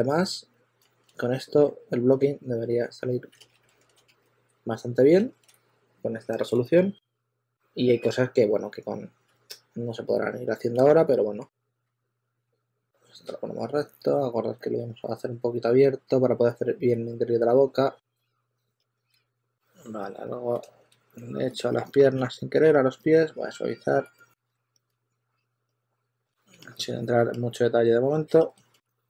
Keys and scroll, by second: 1.6 2, 3.3 super+z, 4.0 2, 6.1-8.0 typing, 9.3 typing, 10.7 typing, 12.3 typing, 15.2 w, 17.2-18.1 typing, 19.1 super+a, 19.2 q, 22.2 s, 24.8 super+z.